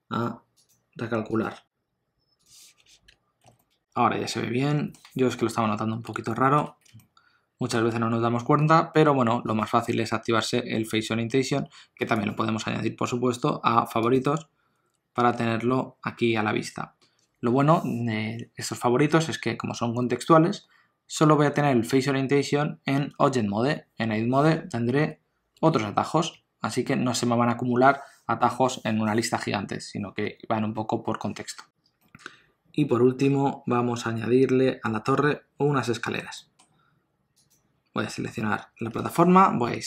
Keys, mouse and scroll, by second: 3.1 Tab, 3.4 alt+a, 3.6 middle click, 6.2 shift+middle click, 6.9 ctrl+middle click, 9.4 click, 15.1 q, 25.0 Tab, 25.5 q, 27.1 Tab, 31.7 ctrl+s, 32.0 middle click, 37.3 click, 39.6 KP_Divide.